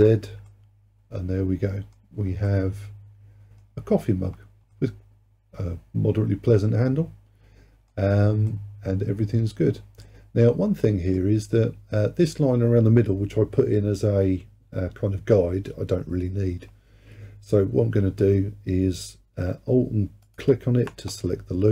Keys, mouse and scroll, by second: 0.5-3.7 middle drag, 3.7-4.4 scroll down 1, 4.4-4.8 scroll down 1, 4.8-7.8 middle drag, 8.2-8.5 scroll up 1, 8.5-11.2 middle drag, 11.2-13.7 scroll up 1, 13.7-14.3 scroll up 1, 20.3 alt+click.